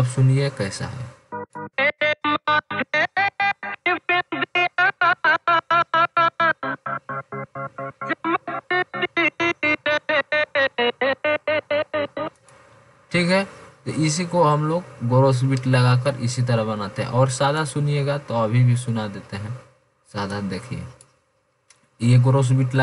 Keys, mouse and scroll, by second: 0.5 click, 17.0 F1, 17.9-18.4 drag.